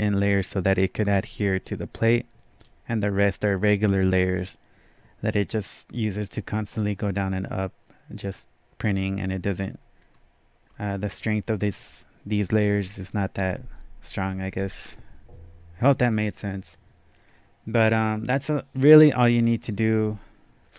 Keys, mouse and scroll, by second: 2.6-4.4 scroll down 1, 10.1-10.7 scroll down 1, 10.7-11.7 scroll up 2, 11.7 scroll down 1, 19.4 scroll down 2.